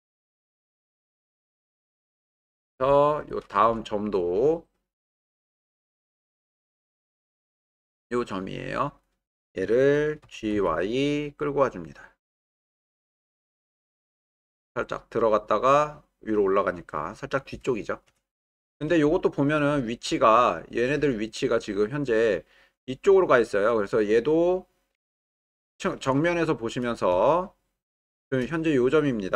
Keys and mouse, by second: 0.1-1.4 drag, 5.2 middle click, 6.5 w, 10.2 g, 10.5 y, 19.0 alt+middle click, 19.8 shift+middle click, 20.3-20.8 ctrl+middle drag, 26.3 shift+middle click, 27.2-28.4 shift+middle drag.